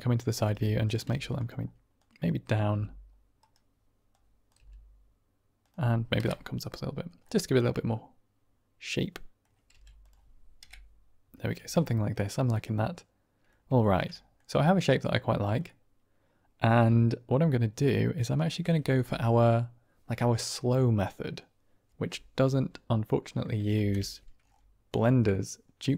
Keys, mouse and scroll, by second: 0.3 r, 0.7 click, 1.0 g, 1.3 click, 2.0 click, 2.6 g, 3.3 right click, 4.0 click, 4.5 g, 5.5 click, 6.5 Right, 7.1-8.4 middle drag, 8.4 click, 9.6 g, 9.9 click, 10.8 Right, 11.5 Tab, 11.7 drag, 11.8-13.4 middle drag, 13.7 shift+middle drag, 14.0 middle click, 15.6-16.1 middle drag, 16.3-17.1 middle drag, 17.1 click, 23.7 ctrl+space, 25.7 click.